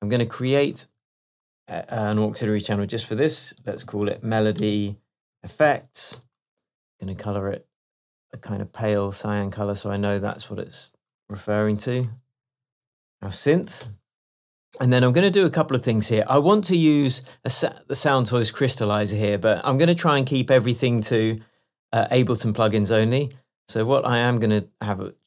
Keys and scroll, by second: 0.8 alt+super+t, 2.2 super+r, 3.1 shift+super+r, 3.4-5.7 typing, 6.2 shift+Return, 6.8 Return, 11.7 super+r, 12.4 super+Left, 12.9 BackSpace, 13.8 e, 13.9 Return, 16.2 Left.